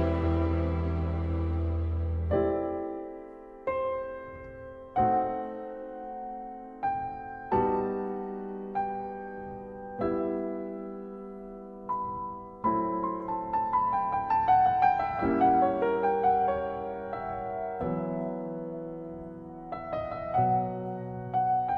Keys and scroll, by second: 0.3 ctrl+z, 0.6 ctrl+z, 1.6 ctrl+t, 3.1 ctrl+s, 3.4 ctrl+e, 5.7 ctrl+z, 6.0 ctrl+z, 6.6 ctrl+z, 7.6 ctrl+z, 7.9 ctrl+z, 8.2 ctrl+z, 8.4 ctrl+d, 9.8 ctrl+z, 10.1 ctrl+z, 11.7 ctrl+e, 12.1 ctrl+z, 14.7 ctrl+z, 15.4 ctrl+z, 15.7 ctrl+z, 16.3 ctrl+z, 19.4 ctrl+z, 19.6 ctrl+z, 21.4 ctrl+z.